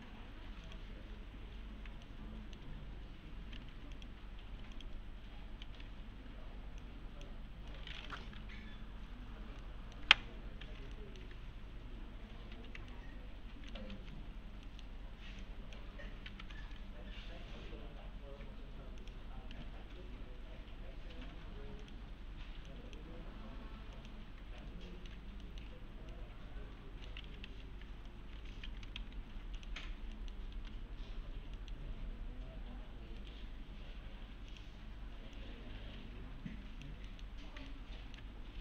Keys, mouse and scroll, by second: 0.7 click, 1.5 4, 2.1-2.7 alt+middle click, 3.9 click, 4.7 ctrl+click, 5.4-6.3 typing, 6.1 scroll down 1, 6.8-7.4 click, 7.7 middle click, 9.6-10.3 middle click, 10.9 alt+middle click, 11.3 3, 12.5-14.4 typing, 12.9-13.9 alt+middle click, 14.2 scroll down 1, 14.7 middle click, 15.0-15.4 scroll up 1, 15.4-16.0 click, 19.0 click, 21.8 click, 24.6-25.2 alt+middle click, 26.1-27.4 alt+middle click, 27.0-28.0 typing, 27.7-28.1 scroll down 1, 28.1 scroll up 1, 28.4 alt+1, 29.0 alt+x, 29.6 click, 29.8 right click, 30.2 middle click, 30.4 scroll down 1, 30.5 s, 31.6 middle click, 33.2 right click, 34.5 click, 35.9 F3, 37.1 middle click, 37.7-38.3 alt+middle click, 38.5 scroll up 1.